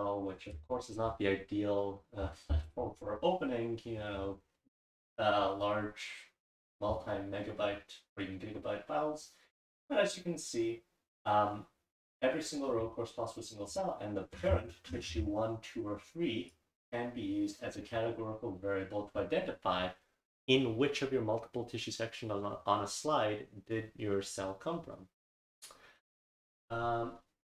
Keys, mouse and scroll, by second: 4.3 click, 14.3 scroll down 1, 16.4 scroll down 1.